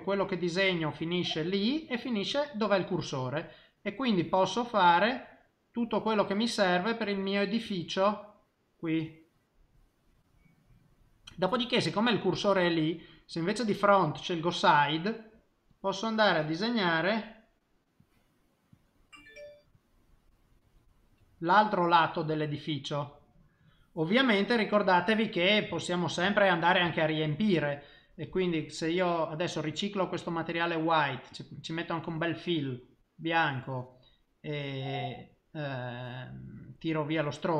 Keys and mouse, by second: 0.0 click, 1.0 middle click, 2.5 middle click, 4.1 click, 4.5 click, 5.2 middle click, 6.6 click, 7.0 click, 7.6 click, 8.1 click, 8.6 click, 9.0 click, 9.4 middle click, 12.1 middle click, 13.0 click, 14.4 middle click, 15.7 click, 16.8 click, 17.4 middle click, 18.0 click, 18.7 click, 19.7 click, 20.7 middle click, 22.3 middle click, 25.7 shift+middle click, 26.3 ctrl+middle click, 26.7 middle click, 27.3 middle click, 29.8 click, 31.3 click, 32.1 click, 37.1 click.